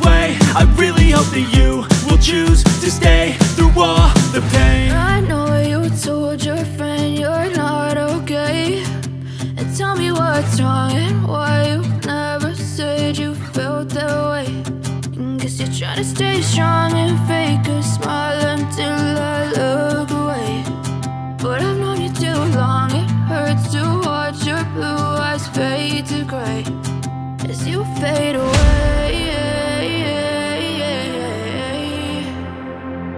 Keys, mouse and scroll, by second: 15.8 double click, 20.2 shift+BackSpace, 20.8 shift+a, 21.5 shift+t, 21.8 shift+r, 21.9 Return.